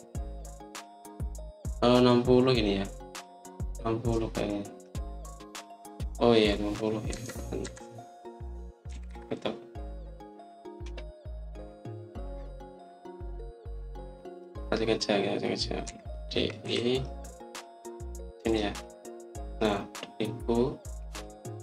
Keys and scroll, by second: 2.4 typing, 8.0 Escape, 8.5 Escape, 9.5-10.5 typing, 16.8-17.5 typing.